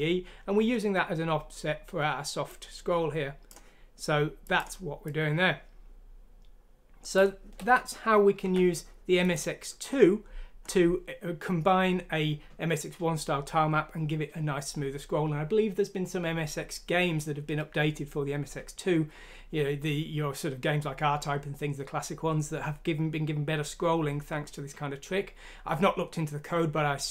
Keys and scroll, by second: 8.4 ctrl+q.